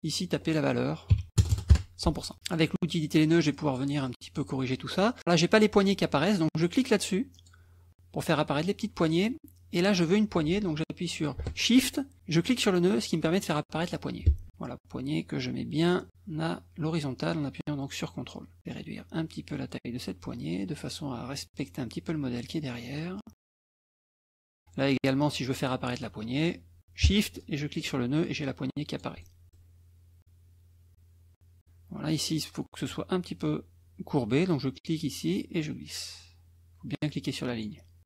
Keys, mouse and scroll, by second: 0.1 click, 1.4 0, 1.7 Return, 2.5 click, 2.9 click, 3.2 middle click, 3.6 click, 4.1 click, 7.4 click, 12.4-18.6 shift+drag, 18.8-21.8 drag, 22.6 middle click, 23.9 click, 27.4-29.2 shift+drag, 30.2-31.6 drag, 35.4-37.8 drag.